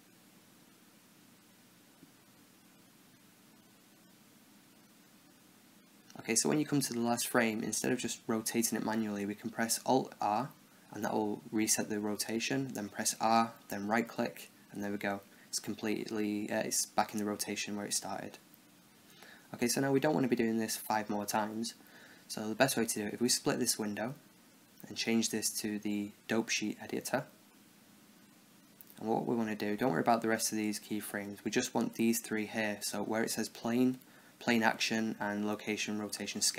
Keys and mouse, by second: 0.0-4.4 typing, 0.0 Right, 0.4 middle click, 0.8 Down, 0.8 Right, 0.9 Left, 1.0 Right, 1.2 Left, 1.8 Right, 2.1 Right, 2.4 Right, 2.8 Right, 3.1 middle click, 3.3 Right, 3.6 Right, 4.0 Right, 4.4 Right, 4.8 Right, 6.9 Right, 11.0 alt+r, 12.5 r, 14.9 Left, 15.3 Right, 15.6 Left, 15.8-17.1 Left, 17.2 Left, 17.4-18.1 Right, 22.3-24.7 drag, 26.2 click, 31.2 a, 31.5 a, 32.4 b, 36.2-36.5 middle drag.